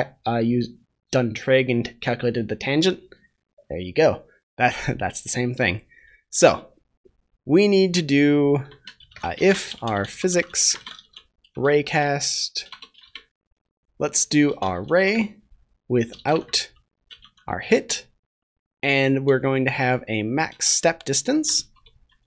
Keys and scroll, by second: 11.5 Return, 20.5 Return.